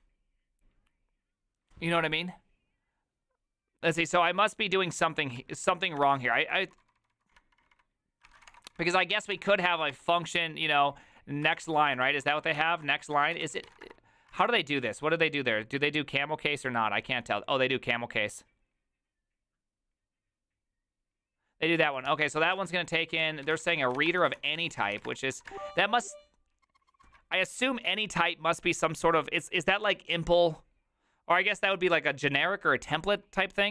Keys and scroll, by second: 5.4 alt+{, 6.0 ctrl+c, 6.2-14.8 typing, 22.1 alt+{, 22.5 ctrl+c, 22.8-27.6 typing.